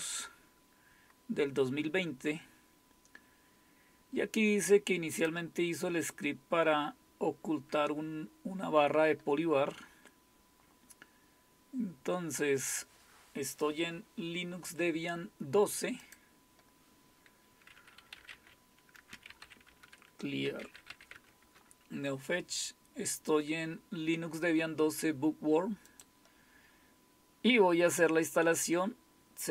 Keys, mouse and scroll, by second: 0.1-2.5 scroll down 1, 2.5-3.2 scroll down 1, 3.2-5.2 scroll down 1, 5.2 click, 9.8-11.1 scroll down 1, 11.1-13.0 scroll down 2, 13.0-16.0 scroll down 1, 16.0 click, 19.4-21.4 typing, 19.7 Return, 21.4 Return, 25.9 click, 26.4 click.